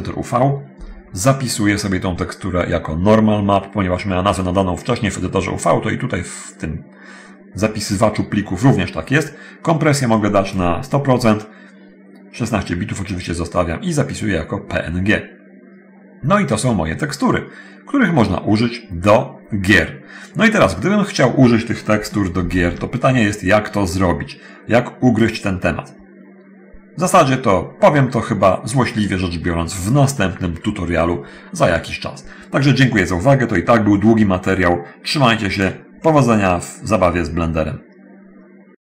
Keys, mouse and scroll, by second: 10.3 click, 13.8 click, 25.3 click, 35.7 click.